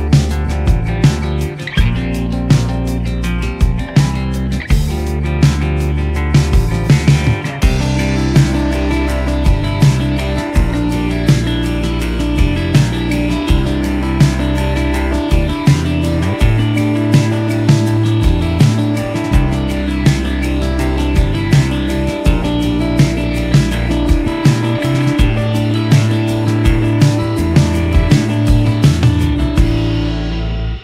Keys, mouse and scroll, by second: 2.2 alt+scroll, 2.2 alt+scroll down 1, 3.2 alt+scroll up 1, 4.3 alt+scroll down 1, 4.6 alt+scroll up 1, 5.9 ctrl+click, 6.3 alt+click, 9.1 alt+click, 12.4 ctrl+0, 12.5 ctrl+0, 14.9 scroll up 1, 22.5 alt+scroll up 1, 23.6 alt+scroll up 1, 23.6-24.4 alt+scroll down 1, 25.1 alt+scroll down 1.